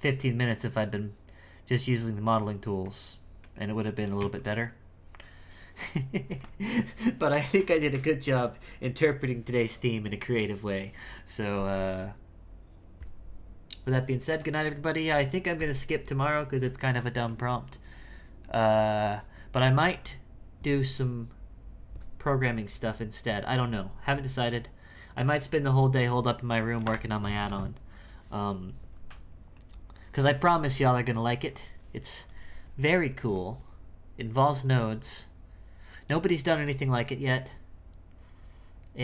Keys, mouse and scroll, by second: 2.8-4.2 middle drag, 4.2 KP_1.